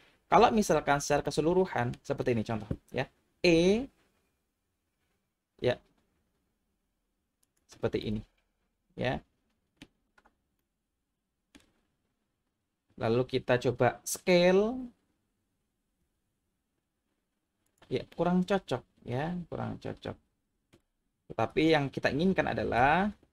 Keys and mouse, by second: 1.3 middle click, 3.4 e, 7.4 click, 8.0-9.8 middle drag, 10.6-11.6 middle drag, 16.1 s, 17.7 click, 18.1-20.7 middle drag, 21.5 ctrl+z, 22.8 ctrl+z.